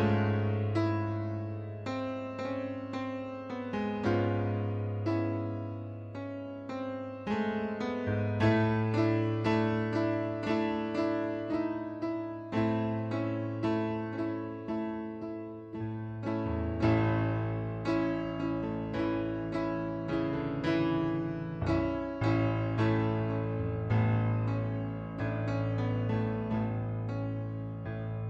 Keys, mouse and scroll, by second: 0.3 shift+click, 1.3 click, 2.0 click, 3.3 right click, 5.0 click, 5.2 middle click, 6.0 click, 6.6 shift+click, 7.0 middle click, 8.0 click, 8.8 click, 9.6 click, 10.1 middle click, 10.6 click, 11.6 shift+click, 13.3 click, 15.0 right click, 15.6 click, 16.6 click, 17.1 right click, 19.8 middle click, 20.4 click, 21.8 click, 22.6 click, 25.2 click, 26.1 click, 26.8 click, 27.9 click.